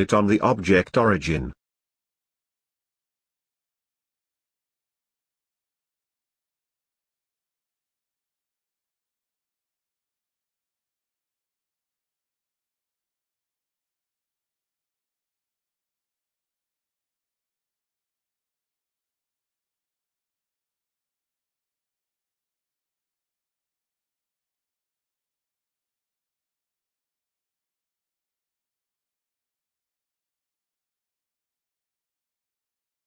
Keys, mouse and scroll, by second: 1.3 shift+s, 3.9 shift+s, 6.8 Tab, 14.5 z, 14.8 middle click, 15.1 r, 17.3 scroll down 2, 17.6-18.6 middle drag, 18.6 r, 20.2-22.3 scroll down 3, 22.3 r, 22.9 alt+r, 23.4 scroll up 1, 23.5-23.9 middle drag, 23.9 scroll down 2, 24.1-27.1 middle drag, 27.1-28.2 scroll down 1, 28.2-29.0 scroll down 2, 29.0-29.6 scroll down 5, 29.6-30.6 middle drag, 30.6-31.3 scroll up 1, 31.3 g, 32.1-33.0 middle drag.